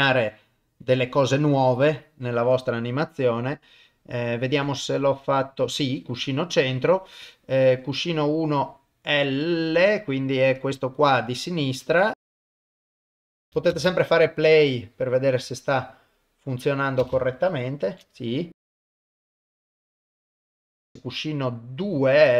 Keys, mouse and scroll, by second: 0.2-1.9 drag, 4.5 middle click, 7.3 click, 12.8 click, 13.7 shift+space, 17.0 shift+space, 17.9 shift+Left, 18.8 click, 19.3 shift+space, 19.9 shift+Left, 20.3 shift+middle click, 21.9 click.